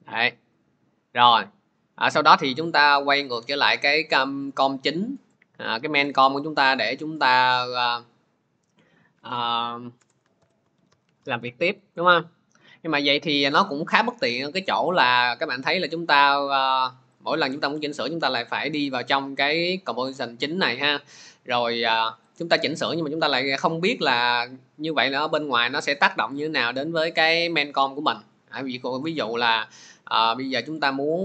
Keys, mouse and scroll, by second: 0.5 click, 1.0-1.3 scroll, 3.2 click, 8.6 click, 9.8 Return, 10.0-12.0 typing, 14.0 typing, 18.2 click, 25.4 click, 29.0 click, 30.7 click.